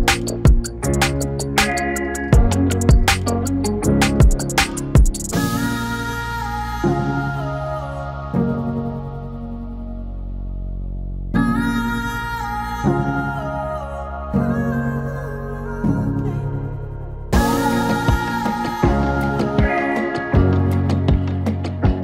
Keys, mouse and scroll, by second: 9.2 scroll up 1, 9.5-10.2 scroll down 1, 10.8-17.9 drag, 18.8-19.3 scroll up 1, 20.4-20.8 scroll down 1.